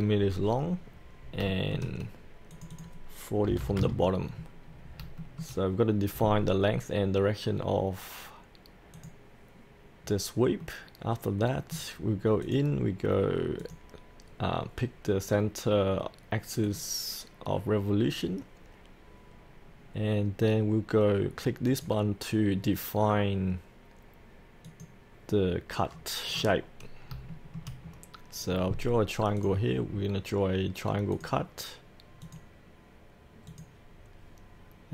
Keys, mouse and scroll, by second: 0.8-1.4 scroll up 1, 1.5-2.5 shift+middle drag, 2.5 click, 3.5 KP_4, 3.6 KP_0, 4.6-5.0 scroll down 1, 5.2 shift+middle click, 8.9 click, 10.0-10.6 scroll up 1, 10.6 middle click, 12.4 click, 14.4-16.6 scroll down 1, 16.6-17.7 drag, 19.7-21.7 scroll up 1, 21.7-25.8 drag, 27.3 shift+middle click, 27.8 scroll down 1, 29.4 click, 29.9 scroll down 1, 31.1 click.